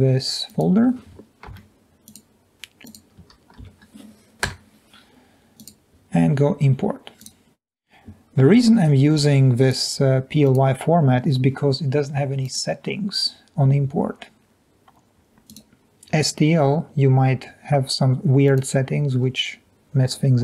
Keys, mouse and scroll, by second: 1.4 ctrl+c, 3.7 ctrl+v, 4.6 Return, 7.2 click.